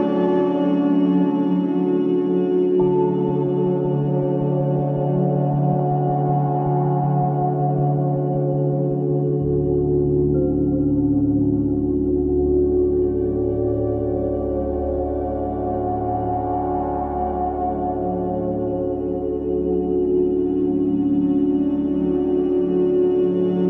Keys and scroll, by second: 7.1 Delete, 16.8 4, 19.5 2.